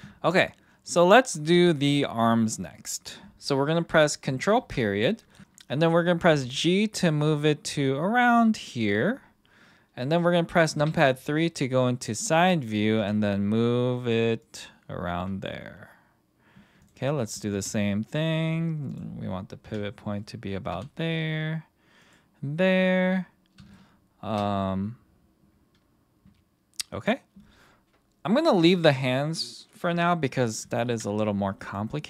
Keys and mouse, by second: 4.6 ctrl+., 6.2 g, 8.5 click, 10.7 KP_3, 12.9 g, 16.8 click, 17.5 g, 19.6 KP_1, 20.7 g, 22.0 click, 23.7-24.3 shift+middle drag, 30.9 ctrl+., 31.6 click.